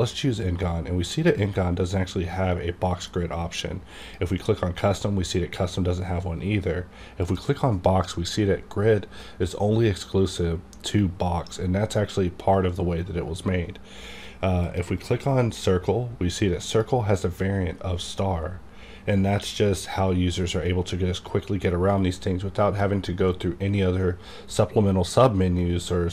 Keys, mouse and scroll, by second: 4.0 click, 7.2 click, 9.3 click, 14.6 click.